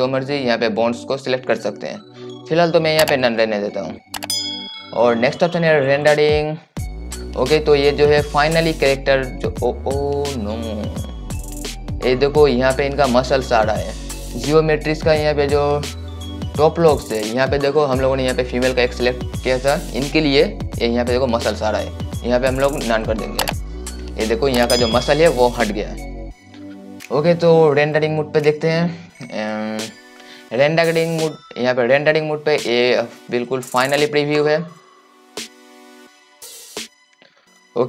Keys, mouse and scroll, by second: 7.5-14.4 right drag, 14.4 click, 23.6 click, 29.6-34.8 right drag, 34.8-37.8 drag.